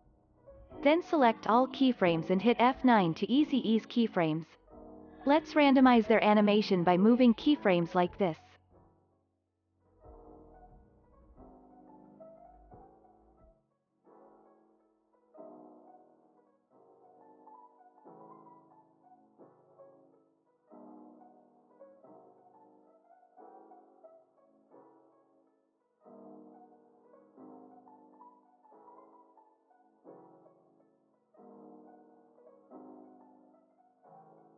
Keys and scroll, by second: 3.2 F9, 4.1 ctrl+s.